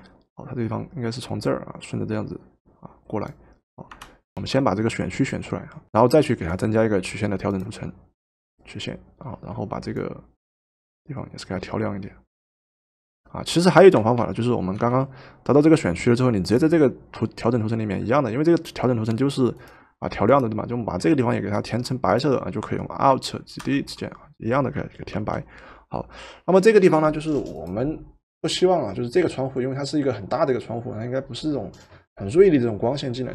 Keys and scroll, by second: 3.9 Return, 4.6 ctrl+z, 5.8 Return, 14.2 ctrl+z, 14.8 ctrl+z, 23.6 alt+Delete, 25.1 ctrl+d.